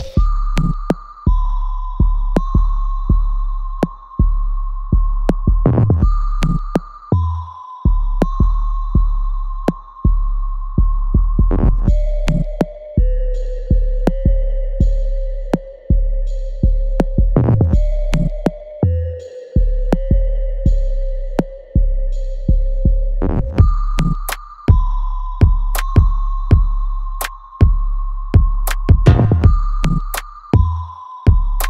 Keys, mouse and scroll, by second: 0.2-2.4 alt+drag, 2.4 ctrl+click, 3.6-5.5 alt+drag, 6.2 alt+middle click, 7.5-11.0 ctrl+drag, 11.4 alt+right click, 12.6 click, 13.1 alt+middle click, 13.9-14.3 scroll down 1, 14.9 alt+middle click, 17.7 click, 18.1 alt+right click, 18.7-20.0 alt+drag, 20.0 alt+middle click, 21.1 right click, 21.8 click, 22.2 alt+middle click, 22.7 alt+click, 24.9-26.2 alt+drag, 26.2 ctrl+s, 27.1 click, 27.8 right click, 28.7-30.6 alt+drag, 30.6 ctrl+click.